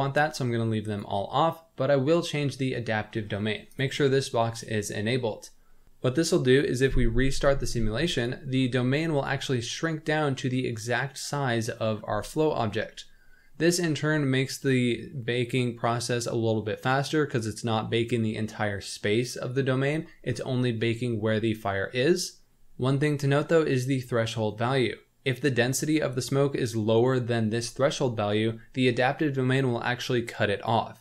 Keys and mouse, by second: 0.8 click, 3.7 click, 8.9 click, 12.8-13.5 middle drag.